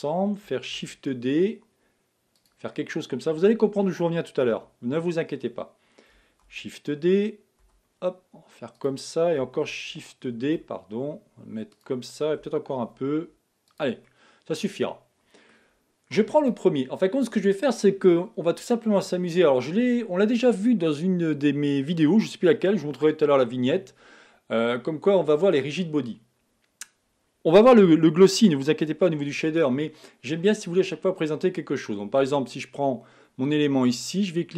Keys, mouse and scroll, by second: 0.9 shift+d, 2.8-3.8 middle drag, 3.8-4.3 scroll up 1, 4.5 KP_7, 6.6 shift+d, 9.9 shift+d, 13.0 shift+d, 14.1-16.4 middle drag, 16.4 click, 31.2 click.